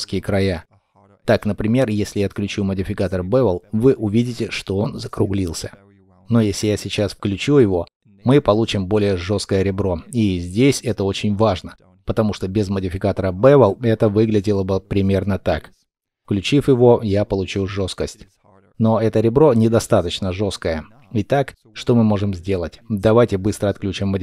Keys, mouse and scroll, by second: 8.1 double click, 10.0 scroll down 1, 10.6 middle click, 11.2 scroll up 1, 13.8 middle click, 17.0 shift+middle click, 18.3 shift+middle click, 23.7 shift+middle click.